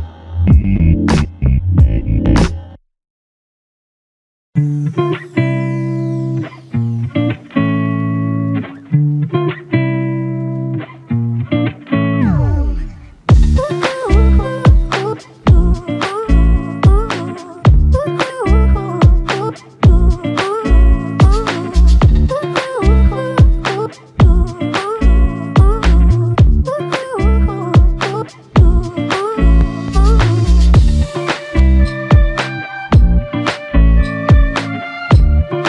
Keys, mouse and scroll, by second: 0.6 alt+click, 2.2 shift+click, 3.5 alt+click, 5.8 alt+click, 7.2 shift+click, 9.7 alt+click, 10.5 shift+click, 10.9 alt+click, 15.9 double click, 20.7 alt+click, 21.3 ctrl+click, 25.5 ctrl+click, 30.7 double click, 31.9 shift+click, 33.5 double click.